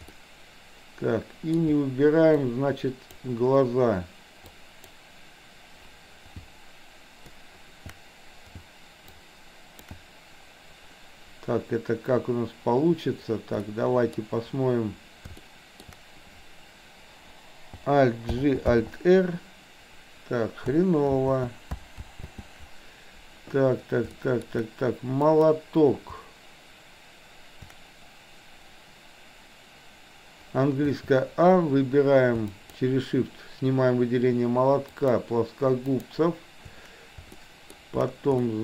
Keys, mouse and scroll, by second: 0.0-1.5 middle drag, 2.3 shift+click, 4.4 shift+click, 9.2 alt+click, 13.7 middle click, 15.4 shift+middle click, 18.3 alt+g, 18.7 alt+r, 21.2 ctrl+z, 22.0 ctrl+z, 24.2 shift+middle click, 25.2 click, 30.9 a, 32.4 shift+click, 34.8 shift+click, 35.9 shift+click, 37.4 shift+middle click, 38.3 middle click.